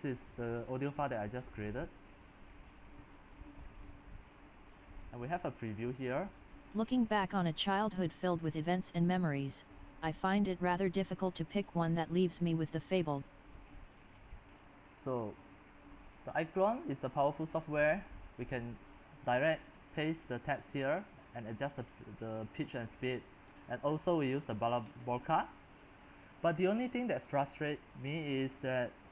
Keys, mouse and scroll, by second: 13.1-29.1 drag.